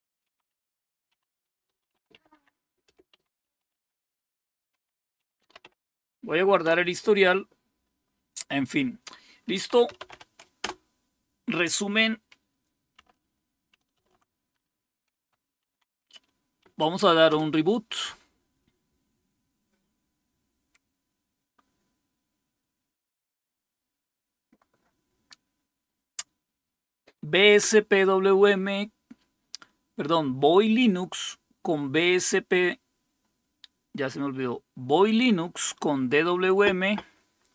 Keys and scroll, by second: 0.0-6.1 typing, 6.6 Return, 9.5-10.6 typing, 10.7 Return, 13.9 super+x, 15.1 Right, 15.7 Down, 16.7 Right, 17.3 typing.